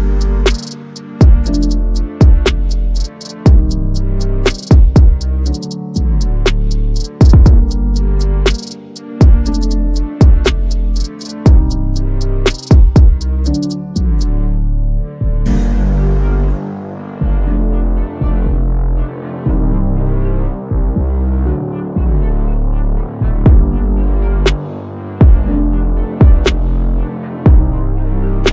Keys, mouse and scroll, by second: 0.9 click, 2.2 click, 3.3 click, 6.3 ctrl+z, 6.6 drag, 8.8 ctrl+z, 9.2 click, 10.2-10.8 scroll down 1, 10.9 click, 12.2 click, 13.7-15.3 drag, 16.3 click, 17.4 alt+scroll down 1, 17.8 click, 17.9 space, 19.6-20.0 click, 20.4 alt+scroll up 1, 20.9 space, 21.0 click, 21.0 space, 21.8-22.3 click, 22.4-23.2 typing, 23.3 click.